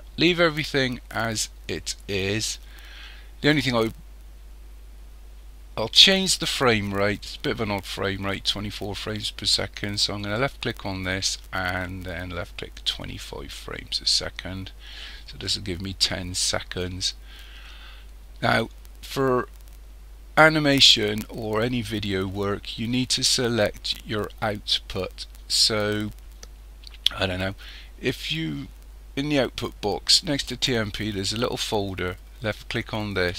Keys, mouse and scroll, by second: 10.2 click, 33.1 click.